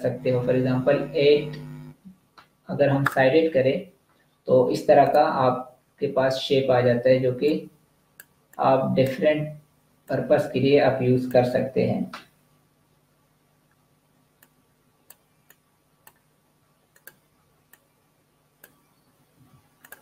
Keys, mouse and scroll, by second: 3.0 click, 7.4 click, 14.2 click, 17.2 z, 17.7 click, 19.3 v, 19.7 click.